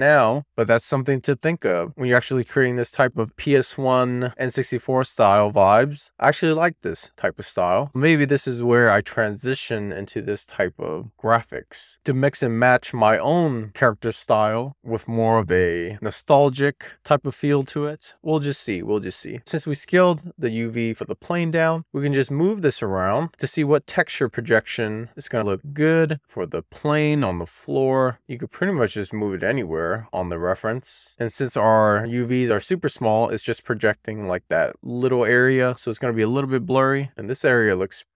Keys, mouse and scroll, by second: 1.6-2.1 scroll down 1, 2.1-2.5 scroll up 1, 2.5-3.5 middle drag, 3.8-5.2 scroll up 1, 6.5 click, 11.1 click, 11.9-12.9 scroll down 1, 12.9-13.2 scroll up 2, 13.2 click, 14.2 click, 19.7 click, 22.4-22.9 scroll down 1, 23.0 scroll up 1, 23.3-24.5 middle drag, 24.7-27.4 scroll up 1, 27.4 click, 31.9 click, 32.7-33.7 scroll down 2, 33.7-34.1 scroll up 2, 34.1 click, 35.1 click.